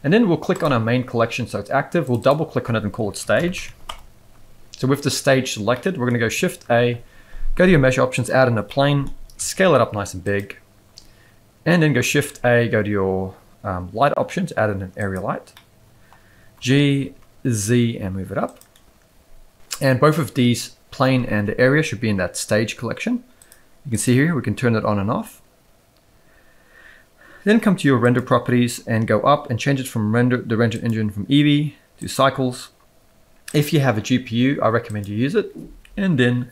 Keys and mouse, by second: 2.2-3.9 drag, 5.7-6.0 middle drag, 6.4 shift+a, 8.7-9.0 middle drag, 9.4 s, 12.0 shift+a, 15.5-16.0 middle drag, 16.5 g, 23.4 click, 28.0 click, 30.7-32.4 drag, 33.5-35.1 drag.